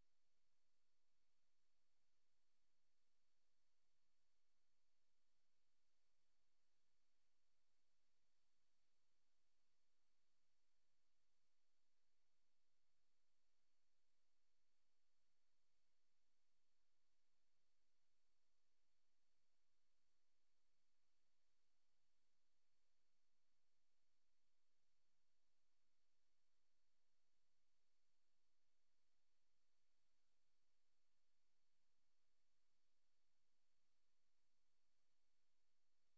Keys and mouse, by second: 0.0 click, 1.0 click, 5.2 Return, 7.9 click, 9.0 click, 9.5 click, 14.9 click, 15.4 click, 16.0 click, 18.0 click, 19.2 click, 19.6 click, 19.9 click, 20.6 click, 20.8 click, 21.5 click, 22.0 click, 22.4 click, 23.4 click, 24.1 click, 25.0 click, 25.4 click, 30.5 ctrl+z, 30.8 ctrl+z, 31.1 ctrl+z, 32.1 ctrl+z.